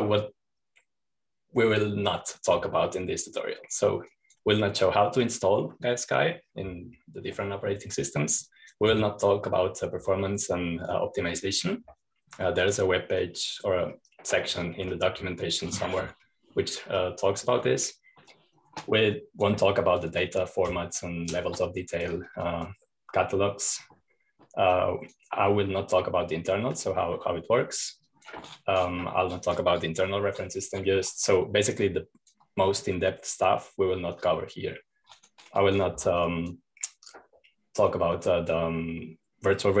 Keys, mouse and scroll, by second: 1.0-3.2 scroll down 1, 5.3 click, 9.7 click, 13.9-15.6 drag, 15.6-16.4 scroll up 1, 16.4-18.0 scroll down 1, 18.0-18.6 scroll up 1, 18.6-18.9 scroll up 1, 19.8-22.0 drag, 23.8 click, 26.1-27.1 drag, 29.4 click, 33.2 click, 33.9-36.0 scroll down 2, 36.6 click, 37.5-38.8 drag.